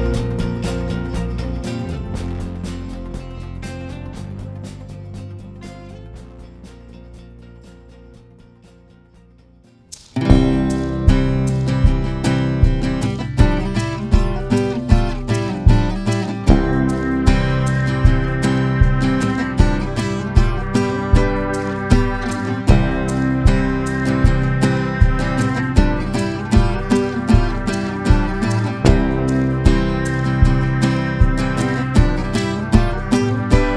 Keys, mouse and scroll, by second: 8.0 scroll up 1, 9.7-19.4 drag, 21.0 ctrl+g, 21.8-25.7 drag, 28.0 click, 31.5-33.7 shift+drag.